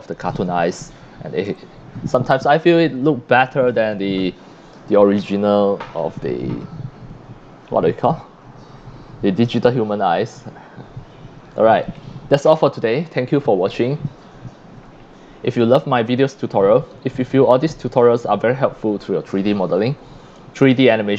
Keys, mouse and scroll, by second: 0.1 click, 1.5 c, 1.6-3.2 drag, 5.6 click, 7.9 click, 11.8 click, 15.9-16.6 drag, 16.0 c, 18.2 c, 18.2-19.0 drag.